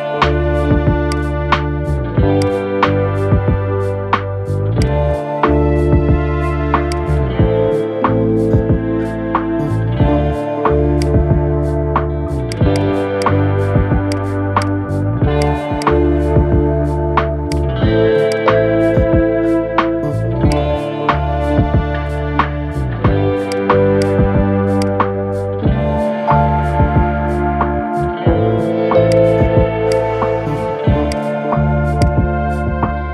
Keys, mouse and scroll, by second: 0.8-2.3 drag, 3.5 Delete, 8.9-9.3 scroll down 2, 9.3 scroll up 2, 10.7 click, 12.2 alt+shift+click, 12.9 alt+shift+click, 13.8 ctrl+click, 14.3 ctrl+click, 15.1 ctrl+click, 15.5 ctrl+click, 16.0-17.2 middle drag, 17.2 ctrl+click, 18.0 click, 20.2 alt+shift+click, 21.4-23.2 middle drag, 23.2 shift+click, 23.8 shift+drag, 24.6 shift+click, 25.3-28.2 middle drag, 28.8-30.9 drag, 31.8 click.